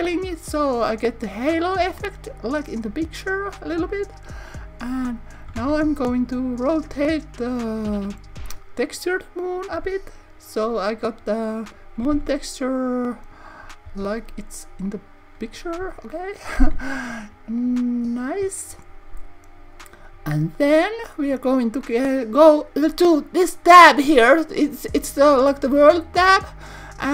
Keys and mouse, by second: 2.4 click, 3.6 click, 5.5 z, 8.8 click, 11.0 click, 12.0 r, 12.1 z, 13.2 click, 13.8 r, 14.8 click, 24.5 click.